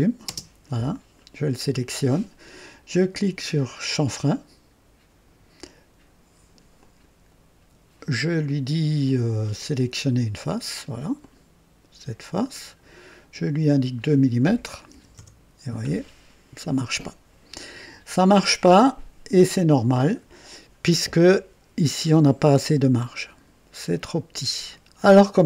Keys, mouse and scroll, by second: 0.3 space, 1.4 click, 6.8 click, 9.6 click, 11.2 click, 12.3 click, 13.7 click, 14.9 KP_2, 15.2 Return, 19.6 click, 21.1-22.0 drag, 22.4-22.7 scroll up 1, 24.7-25.4 drag.